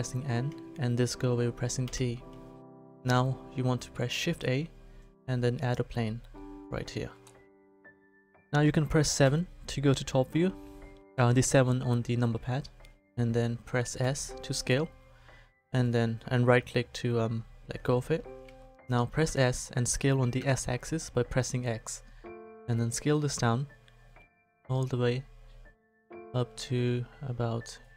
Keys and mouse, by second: 0.2 n, 1.8 t, 2.9 shift+a, 6.8 middle click, 7.4 middle click, 9.2 KP_7, 14.0 s, 19.2 s.